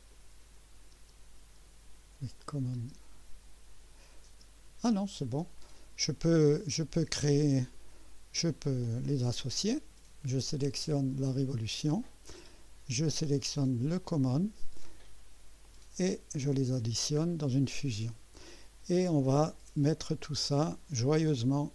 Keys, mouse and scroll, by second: 0.9 space, 2.4 click, 2.7 space, 4.3 space, 5.7-6.7 drag, 7.7-8.6 drag, 11.5 click, 14.0 ctrl+click, 15.6 click, 16.9-17.2 scroll down 2, 21.3-21.7 drag.